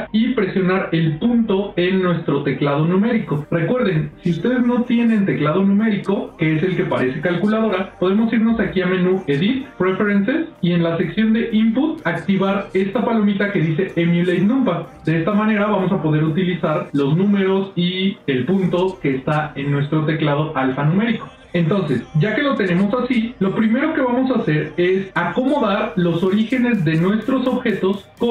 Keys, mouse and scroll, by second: 1.0 KP_Decimal, 8.9-12.1 drag, 23.2 shift+middle click, 24.5 middle click, 25.0 ctrl+middle click, 27.6 shift+middle click.